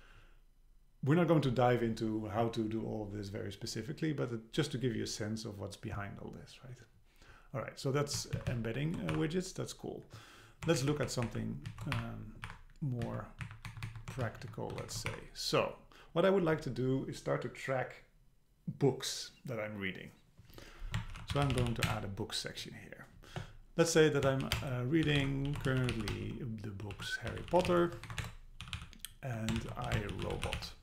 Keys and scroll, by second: 8.4 shift+Down, 9.1 BackSpace, 10.8 shift+Up, 11.7 shift+Down, 12.0 BackSpace, 12.7 Delete, 13.0 Down, 13.5 Up, 13.7 Right, 14.2 shift+Down, 14.8 shift+super+Right, 15.1 Delete, 21.9 Return, 28.1 super+Right, 28.2 Return.